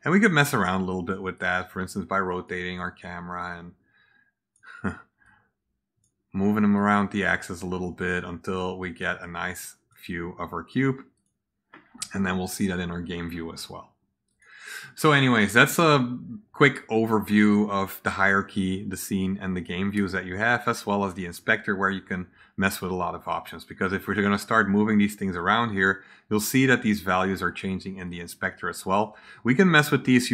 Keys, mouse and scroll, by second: 1.3-2.4 drag, 3.3-4.5 drag, 5.1-5.9 drag, 6.7-8.0 drag, 8.9-9.8 drag, 11.1 click, 14.2 click, 23.9 click, 24.9-26.4 drag, 28.0-28.9 drag.